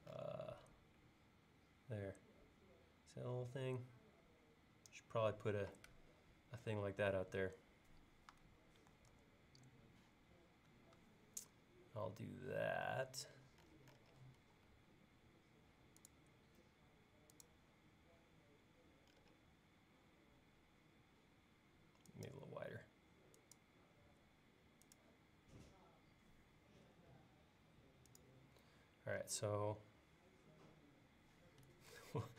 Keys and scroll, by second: 9.2 super+Tab, 14.5 l, 27.0 Up, 32.1 super+Tab.